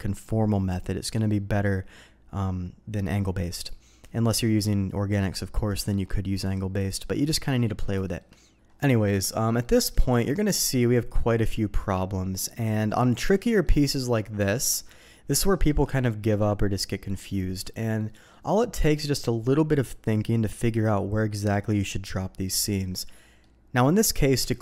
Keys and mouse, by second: 0.7-3.7 drag, 4.6-6.1 drag, 6.3-6.9 drag, 7.4 middle click, 8.0 shift+middle click, 9.0 middle click, 9.6 middle click, 10.0-12.5 middle drag, 13.2 click, 13.5 middle click, 14.4 alt+a, 14.7 middle click, 15.4 shift+middle click, 15.9 middle click, 17.0 middle click, 18.1 middle click, 22.9 middle click.